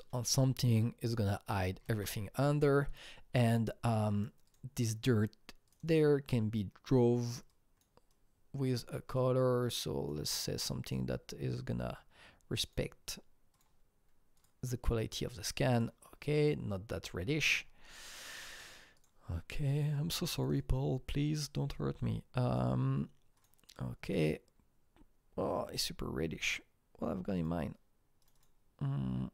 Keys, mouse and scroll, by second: 1.8 Tab, 1.8 click, 1.8 scroll down 1, 4.4 alt+Tab, 4.4-6.0 drag, 7.5 click, 8.1-8.7 drag, 9.1 click, 10.7-12.7 drag, 13.5-14.3 drag, 15.7 click, 17.1-18.9 scroll up 9, 18.9 click, 19.3-20.3 scroll down 5, 20.3 double click, 21.7 click, 22.0 scroll down 1, 24.0-25.7 drag, 25.7 click, 26.3-27.1 scroll down 1, 27.3 click, 28.2 click, 28.3 double click.